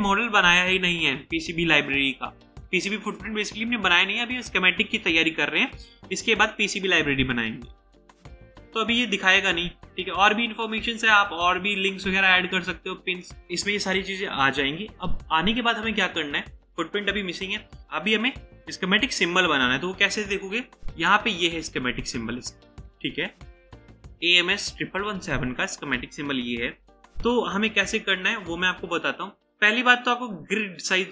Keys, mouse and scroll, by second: 8.9 scroll up 1, 9.5-10.0 scroll down 1, 10.8-11.3 scroll down 1, 11.3-11.9 scroll down 1, 12.3 scroll up 1, 12.5 scroll down 1, 30.8 right click.